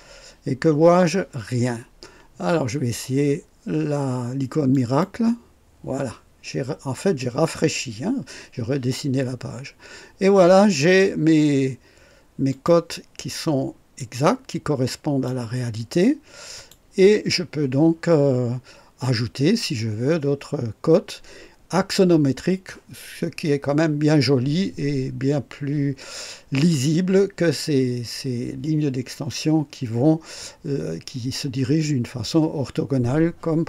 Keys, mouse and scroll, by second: 4.7 click, 12.5 click, 13.9-15.4 drag, 16.5 click.